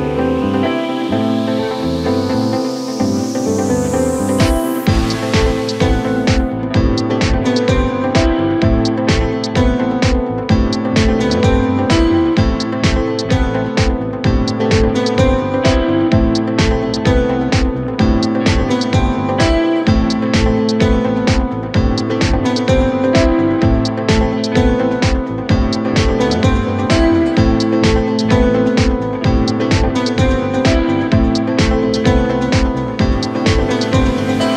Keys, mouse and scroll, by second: 0.0-1.1 middle drag, 1.1 2, 1.8 click, 2.4 click, 3.0-3.6 scroll down 1, 3.6 KP_1, 4.3-5.1 scroll up 1, 5.1 e, 6.1 s, 7.6 KP_7, 9.2 KP_1, 12.0 e, 14.8 scroll down 1, 15.1-16.3 middle drag, 16.3-18.6 drag, 18.6 3, 19.5 i, 22.5 click, 23.4 KP_1, 24.2-25.3 scroll up 1, 25.3 ctrl+r, 28.7 s, 31.2 middle click, 32.0-33.3 scroll up 1, 33.3 ctrl+r.